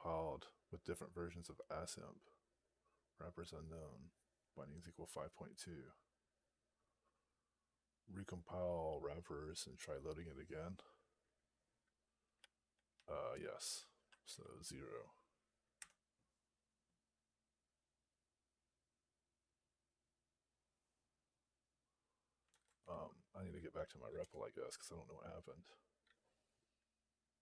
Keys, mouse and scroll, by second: 12.2 Down, 12.5 Down, 12.8-13.6 Up, 14.2 Up, 15.6 0, 24.1 Return.